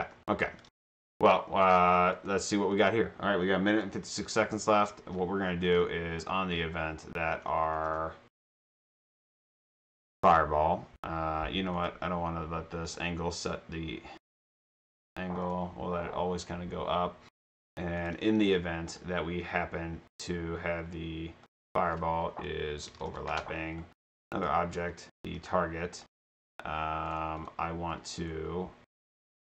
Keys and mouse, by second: 0.0 a, 0.4 d, 0.7 space, 2.2 click, 2.7 click, 5.7 click, 6.3 click, 11.8 click, 12.9 click, 14.2 click, 15.4 click, 18.0 click, 18.5 click, 18.9 click, 21.5 click, 21.6 click, 22.6-26.0 typing, 24.4 click, 27.1 click, 27.4 click, 28.2 right click, 29.4 click.